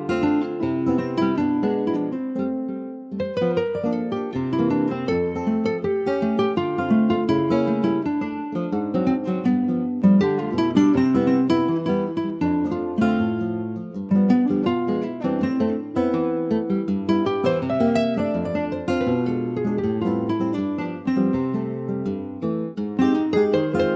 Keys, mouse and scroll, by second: 2.1-2.6 scroll up 1, 2.6 ctrl+s, 3.0 shift+middle click, 3.5 s, 8.3-10.2 shift+middle drag, 10.2 s, 19.8 Tab, 20.0 click, 20.6 alt+z, 21.1 middle click, 21.9 ctrl+s, 21.9 click, 22.5 middle click, 23.2 ctrl+s, 23.6 middle click.